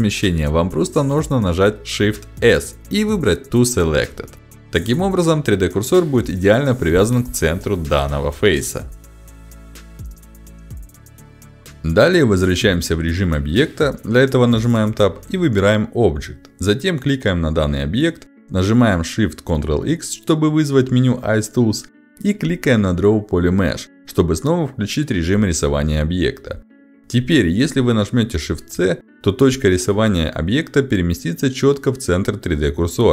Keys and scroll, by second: 2.0 shift+s, 17.8 ctrl+shift+x, 30.6 shift+c.